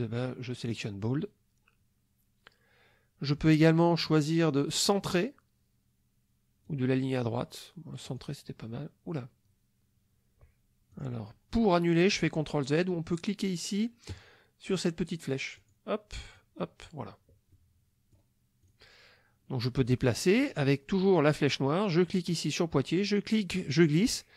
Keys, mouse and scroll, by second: 0.7 click, 4.9 click, 6.7 click, 8.1 click, 10.9 click, 15.6 click, 16.3 click, 17.5 click, 18.6 click, 23.0-24.3 drag.